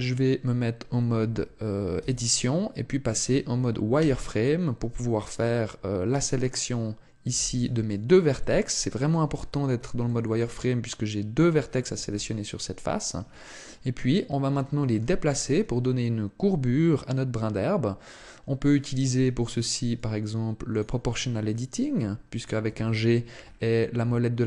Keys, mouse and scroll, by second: 2.0 Tab, 4.0 z, 7.3 b, 8.4 middle click, 9.4 scroll up 4, 10.0 shift+middle click, 12.0 KP_3, 13.2 scroll down 1, 13.4-13.8 scroll up 4, 14.1 scroll down 1, 14.6 shift+middle click, 18.9 click, 22.6 g.